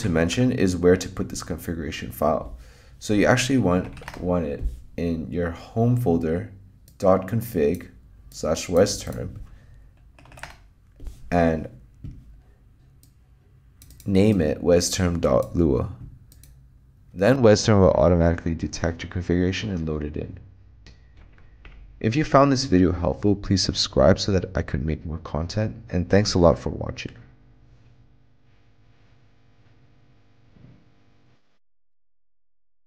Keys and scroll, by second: 0.0 alt+q, 0.2-1.6 typing, 3.4-4.8 typing, 10.1-10.9 typing, 21.2 alt+q.